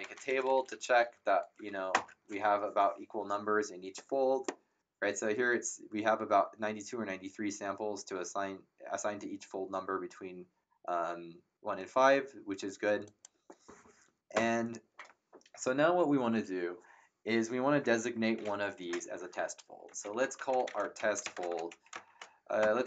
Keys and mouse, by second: 0.0-1.6 typing, 1.9 ctrl+Return, 13.0 click, 14.3 Return, 14.3 KP_Enter, 19.6-22.6 typing.